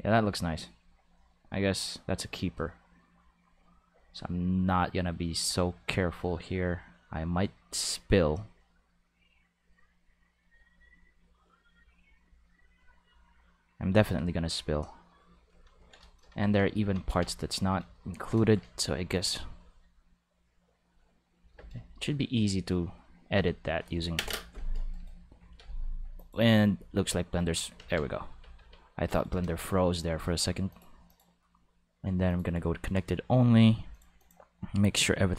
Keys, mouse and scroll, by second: 0.6-15.3 drag, 16.5 ctrl+middle click, 16.8 ctrl+middle click, 17.1 Tab, 20.7 click, 22.0 middle click, 22.8 middle click, 23.2 g, 24.9 middle click, 25.4 alt+a, 26.2 click, 27.8 ctrl+s, 28.3 Tab, 29.1 right click, 30.7 click, 31.1 click, 32.3 click, 33.9 click, 34.2 click.